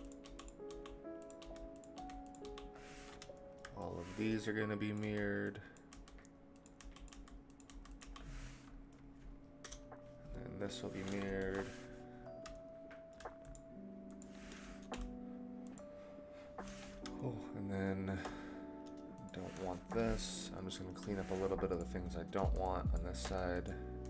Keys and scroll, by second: 9.6 KP_0, 11.3 Delete, 14.9 Delete, 19.8 Delete, 22.3 Delete.